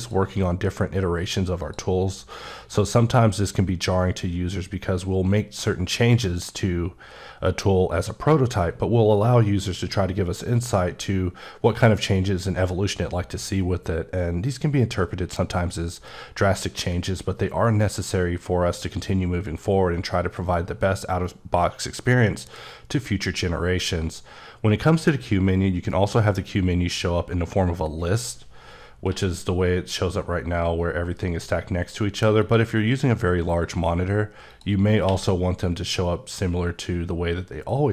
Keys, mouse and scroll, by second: 1.5 click, 29.0 q, 32.3 click, 34.4 click, 35.0 q.